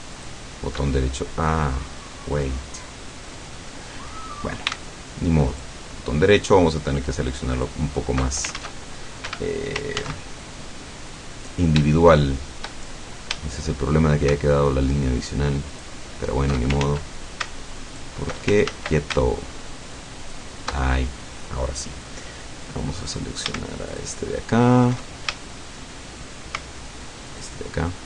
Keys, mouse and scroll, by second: 0.2 alt+shift+right click, 0.9-3.7 alt+shift+middle drag, 5.5 alt+shift+right click, 7.6 alt+shift+right click, 8.6 ctrl+alt+shift+z, 9.8 ctrl+Escape, 10.0 ctrl+z, 10.5-11.7 ctrl+middle drag, 12.0 shift+middle click, 12.9-13.5 shift+scroll up 5, 13.5 shift+middle click, 15.7 alt+shift+right click, 16.9 ctrl+alt+shift+z, 17.9 alt+shift+right click, 18.7 ctrl+alt+shift+z, 20.3 alt+shift+right click, 22.3 scroll up 2, 23.9 alt+shift+right click, 25.5-26.5 shift+middle drag, 27.3 alt+shift+right click.